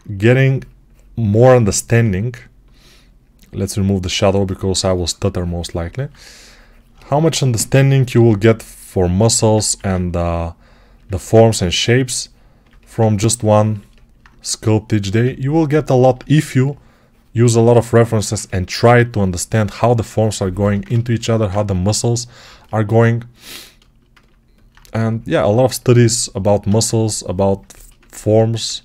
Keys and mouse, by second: 6.7 click, 8.0 g, 9.5 1, 12.5-18.2 ctrl+drag, 18.2-22.3 shift+right drag, 22.3-24.6 alt+shift+drag, 24.6-28.4 shift+right drag, 28.4-28.8 ctrl+alt+drag.